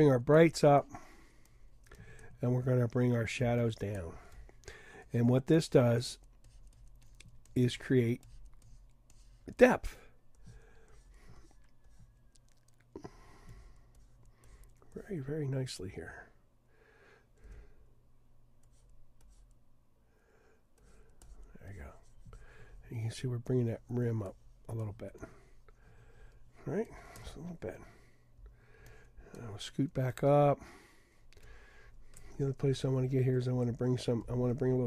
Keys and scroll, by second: 17.4 d, 32.7 super+=, 33.4 super+=.